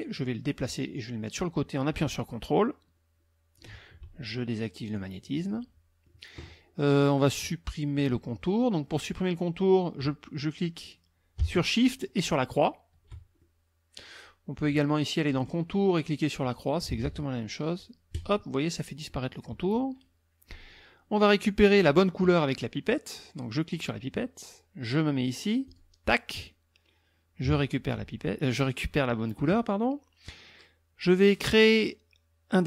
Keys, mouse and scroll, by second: 0.5-3.7 drag, 4.9 click, 5.5 click, 12.2 shift+click, 13.4 shift+click, 15.2 click, 16.4 click, 17.0 ctrl+z, 18.1 click, 19.1 click, 23.7 click, 25.7 click.